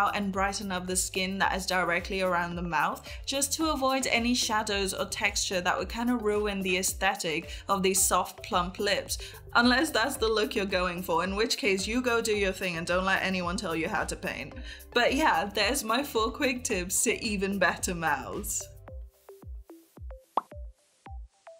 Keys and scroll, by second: 1.6 ctrl+z, 3.8 space, 12.8 ctrl+s, 14.0 [, 14.4 [, 14.8 ctrl+z, 15.4 ctrl+z, 17.5 ctrl+z.